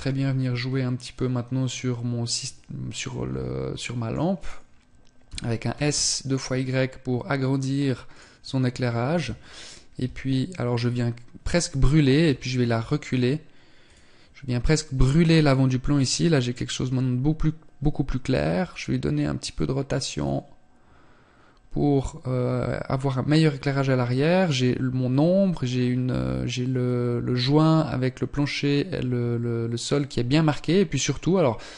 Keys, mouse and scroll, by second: 0.7 click, 2.6 middle click, 3.9 right click, 4.9 s, 9.6 KP_3, 11.8 g, 19.9 click.